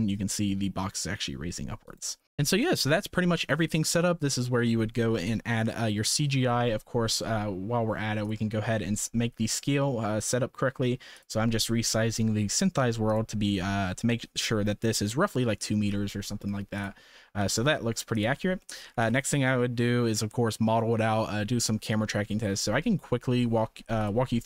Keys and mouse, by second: 2.2 ctrl+s, 8.9 s, 13.0 click, 16.7 click, 17.3 s, 18.7 shift+middle click, 19.0 s, 22.2 shift+middle drag, 24.0 click.